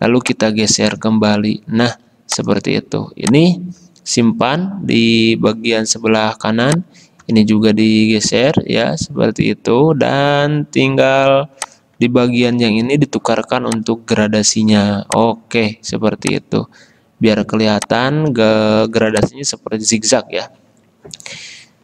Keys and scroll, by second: 19.0 v.